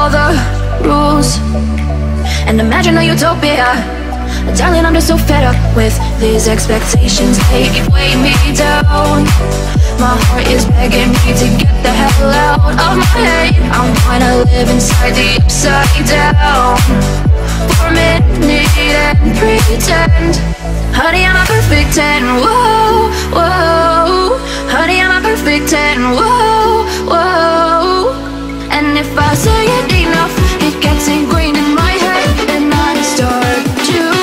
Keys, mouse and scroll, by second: 0.3 shift+click, 5.2 m, 5.7 ctrl+click, 7.0 Right, 7.2-8.6 typing, 11.2 shift+click, 16.3 m, 17.1 ctrl+click, 18.3 Right, 19.1 click, 20.0-20.7 typing, 20.4 Return, 21.8 click, 22.3 ctrl+click, 27.1 ctrl+x, 28.3 scroll up 1, 28.6-30.1 middle drag, 30.1-32.2 drag, 32.2 right click, 32.7 click.